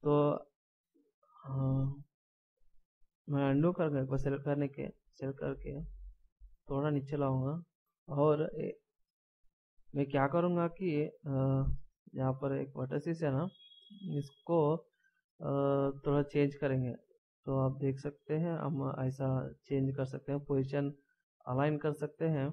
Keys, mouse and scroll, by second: 3.6 ctrl+z, 5.8 click, 8.7 a, 11.2 middle click, 12.4 scroll up 1, 16.2 click, 16.9 scroll up 1, 17.1 right click, 17.1 click, 19.2 right click, 20.0 click.